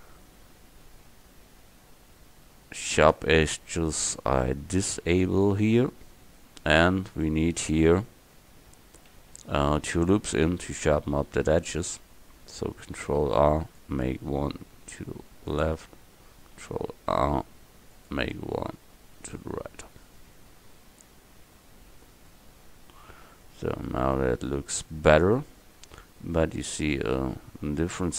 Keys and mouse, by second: 7.7-9.4 middle drag, 8.4 Tab, 13.1 ctrl+r, 19.3 ctrl+r, 20.2 Tab.